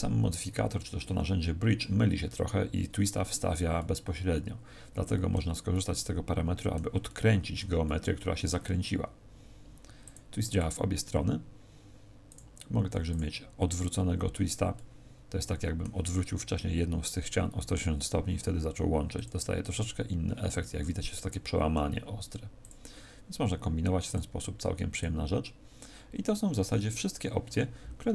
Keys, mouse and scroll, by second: 3.8 middle click, 5.7 middle click, 10.0 click, 10.4 click, 12.2 click, 14.7 middle click, 19.1 click, 19.6 click, 20.6 middle click, 22.6 click, 24.0 click.